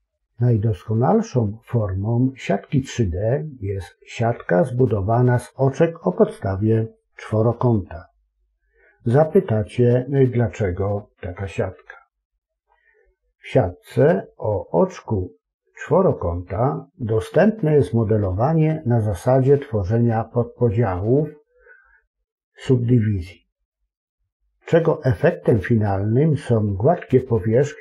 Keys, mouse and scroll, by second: 0.3 Tab, 1.4 w, 1.5-3.2 right drag, 3.2 click, 3.6 a, 3.7 shift+click, 4.0 s, 4.4 ctrl+click, 5.0-6.7 drag, 6.7 middle click, 7.1 click, 7.6 e, 8.0 scroll down 1, 8.1 middle click, 8.4 click, 8.5 shift+click, 8.8 i, 9.5-10.9 drag, 9.9 BackSpace, 10.8 Return, 10.9 middle click, 12.0 click, 12.4 click, 12.6 ctrl+KP_Add, 12.7 middle click, 13.6 alt+a, 14.0 shift+click, 14.1 ctrl+KP_Add, 14.3 middle click, 14.5 e, 15.6 click, 16.1 alt+shift+click, 16.4 ctrl+b, 17.0 click, 17.3 click, 17.6 middle click, 19.1 click, 19.7 ctrl+KP_Add, 20.0 ctrl+KP_Subtract, 20.2 g, 20.4 click, 20.8 ctrl+KP_Add, 21.1 g, 21.9 click, 22.0 scroll up 2, 22.1 KP_1, 22.3 s, 22.7 middle click, 23.1 click, 23.4 click, 23.6 alt+a, 23.8 middle click, 23.9 scroll up 1, 24.0 ctrl+b, 24.3 click, 24.6 middle click, 25.2 Tab, 25.3 middle click, 25.6 Tab, 25.8 middle click, 26.4 ctrl+r, 26.9 middle click, 27.2 ctrl+r.